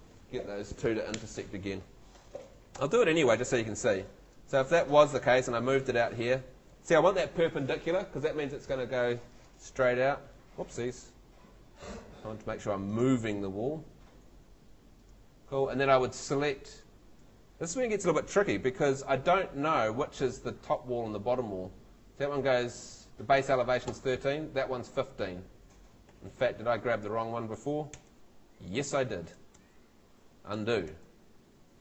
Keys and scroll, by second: 2.8 F2, 10.9 super+z, 20.6 Tab, 23.9 Tab, 26.1 Escape, 27.9 F3, 29.5 super+z, 30.9 super+Escape.